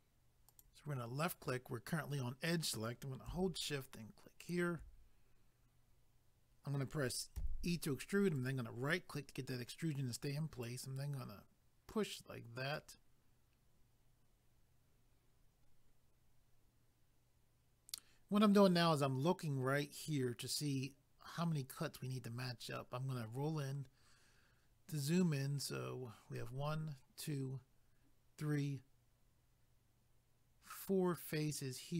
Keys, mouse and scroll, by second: 0.5 click, 4.4 shift+click, 8.4 right click, 10.6 click, 21.9 scroll up 2.